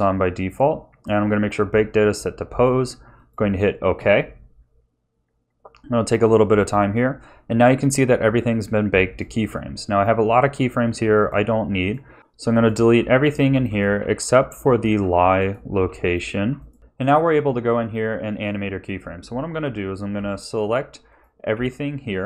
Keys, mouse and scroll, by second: 9.0 click, 11.1 click, 11.8 click, 12.2 Delete, 12.2 ctrl+z, 12.2 click, 12.9 Delete, 12.9 click, 13.2 click, 13.5 Delete, 13.6 click, 14.0 Delete, 14.1 click, 14.6 click, 14.9 Delete, 15.3 click, 15.7 Delete, 16.1 click, 16.3 Delete, 16.6 click, 16.8 middle click, 20.1 s, 21.0 click, 21.5 a.